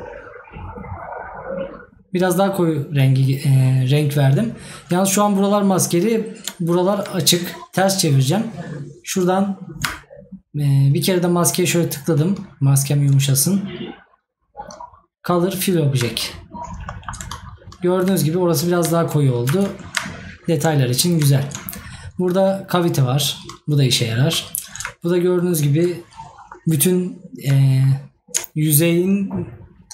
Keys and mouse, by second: 16.9 right click, 25.3 right click.